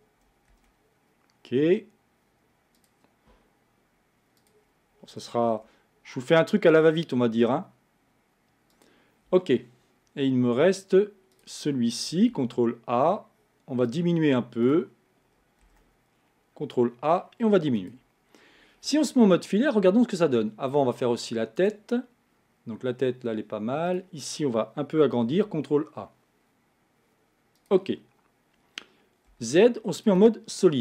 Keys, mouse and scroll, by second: 0.6 ctrl+a, 4.4 click, 5.5 ctrl+a, 11.4-12.5 drag, 12.5 ctrl+a, 14.6 click, 15.6 ctrl+a, 18.3 scroll down 2, 21.6 click, 23.9 click, 25.3 ctrl+a, 28.0-29.3 scroll down 1, 29.3 z, 30.7-30.8 middle drag.